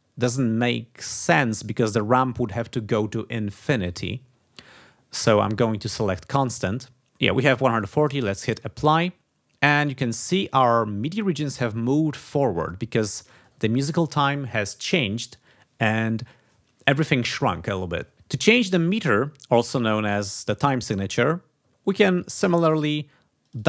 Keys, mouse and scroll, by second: 5.2-6.7 drag, 8.5 click, 11.4 ctrl+scroll down 2, 13.0 ctrl+scroll down 2, 23.4 click.